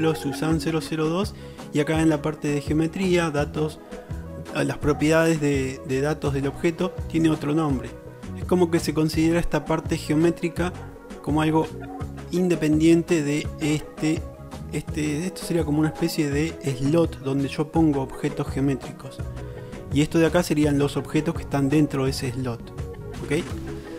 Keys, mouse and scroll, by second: 0.5-1.8 middle drag, 7.4-8.5 drag.